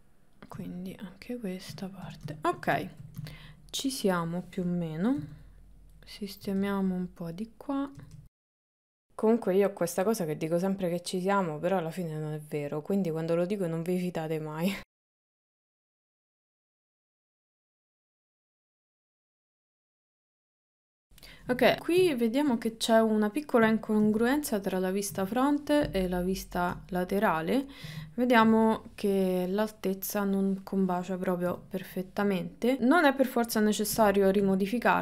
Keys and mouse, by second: 0.7 shift+middle click, 1.9 shift+middle click, 2.4 ctrl+middle click, 3.0 shift+middle click, 5.2 g, 6.5 g, 7.8 click, 8.5 g, 9.0 g, 10.3 shift+middle click, 11.1 click, 11.6 click, 11.7 click, 12.1 click, 12.7 click, 13.1 click, 13.5 click, 13.9 click, 14.8 click, 15.2 g, 15.6 g, 16.0 KP_1, 16.4 shift+middle click, 17.3 g, 17.7 g, 19.6 g, 20.2 g, 20.6 KP_3, 21.5 ctrl+middle click, 24.1 KP_1, 25.2 KP_3, 28.5 KP_1, 31.5 KP_3, 34.0 Tab, 34.5 Tab.